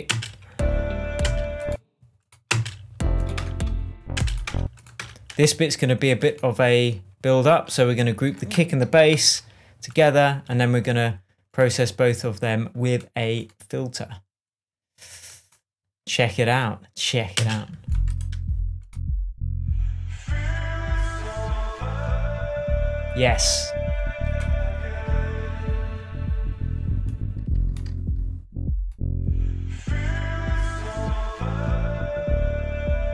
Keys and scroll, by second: 0.5 space, 1.6 space, 2.9 space, 3.8 BackSpace, 4.5 space, 4.9 BackSpace, 9.5 super+g, 17.7 space.